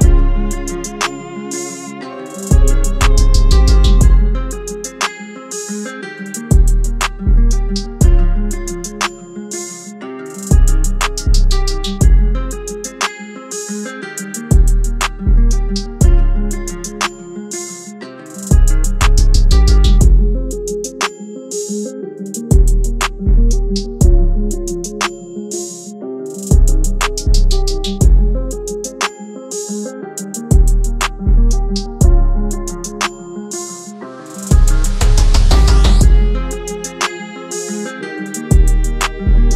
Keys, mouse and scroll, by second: 9.5 double click, 32.3 right click, 35.9 double click.